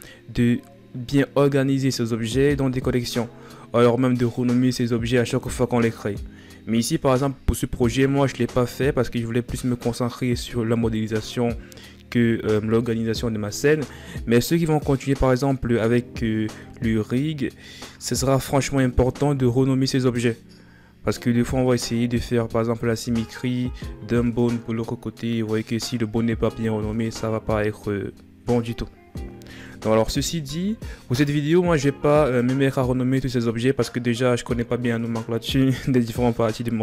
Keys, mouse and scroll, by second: 32.6-35.9 scroll down 10, 35.9-36.5 scroll down 1.